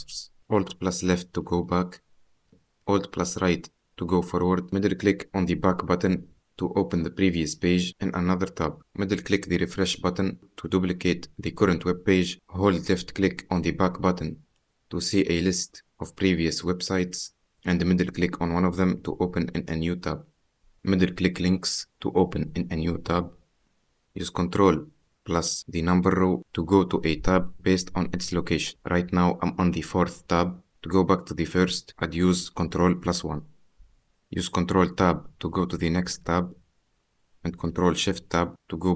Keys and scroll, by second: 0.7 alt+Left, 3.3 alt+Right, 25.7 ctrl+1, 26.9 3, 27.5 4, 33.3 ctrl+1, 35.0 ctrl+Tab, 38.4 ctrl+shift+Tab.